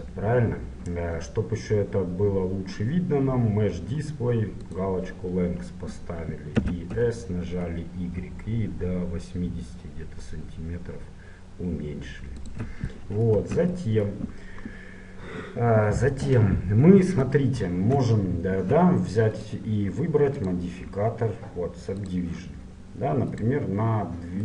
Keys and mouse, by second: 4.7-6.7 drag, 6.7 s, 12.9-14.7 middle drag, 13.5 Tab, 19.5-22.5 drag, 23.5-24.4 drag.